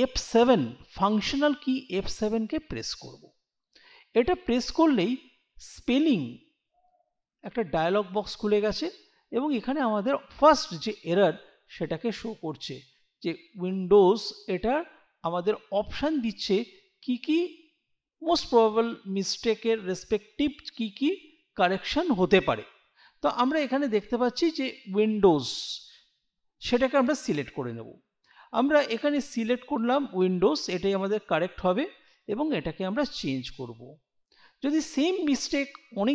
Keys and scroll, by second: 2.5 F7.